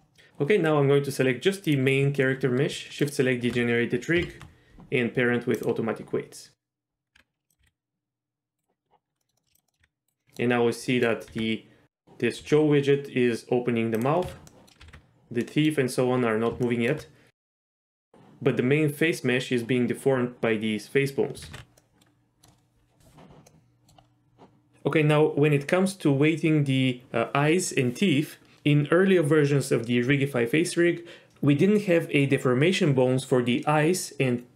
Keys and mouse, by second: 1.6 click, 3.0 shift+click, 4.1 ctrl+p, 7.1 Tab, 7.6 r, 8.1 r, 9.2 middle click, 9.4 shift+middle click, 9.5 click, 9.7 middle click, 9.8 r, 10.1 right click, 10.2 middle click, 10.9 middle click, 11.3 r, 12.4 r, 14.0 click, 14.2 z, 14.5 middle click, 14.8 r, 14.9 r, 15.4 middle drag, 16.6 shift+middle drag, 17.9 z, 21.5 ctrl+z, 21.8-22.4 middle drag, 23.5-23.9 middle drag.